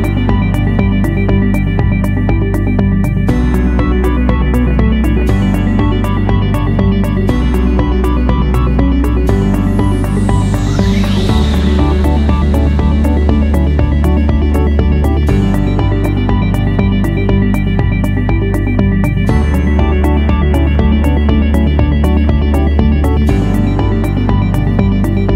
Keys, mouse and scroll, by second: 1.5 5, 3.1 0, 3.4 Return, 10.1 ., 10.6 5, 11.4 Return, 16.6-17.9 drag, 17.9 1, 18.3 Return.